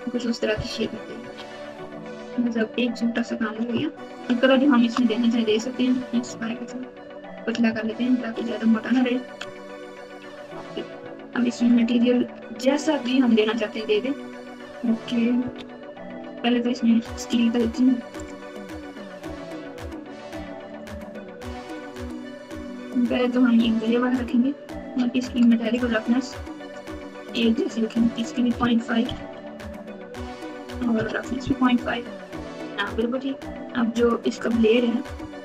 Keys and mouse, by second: 0.8 Tab, 1.2 Tab, 1.7 alt+z, 2.6 click, 4.1 shift+click, 5.4 s, 7.5 click, 7.6 Tab, 8.3 alt+z, 9.4 z, 15.5 ctrl+KP_2, 18.1 click, 20.7 click, 28.0-31.0 drag, 34.5 Tab.